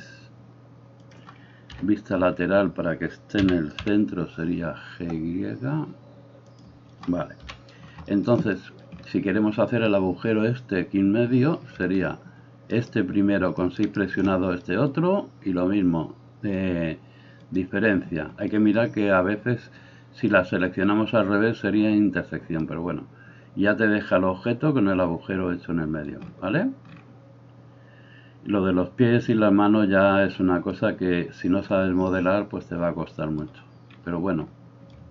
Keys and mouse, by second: 1.7 KP_3, 3.5 g, 7.4 KP_1, 13.9 shift+right click, 17.5-35.1 drag, 35.0-35.1 shift+middle drag.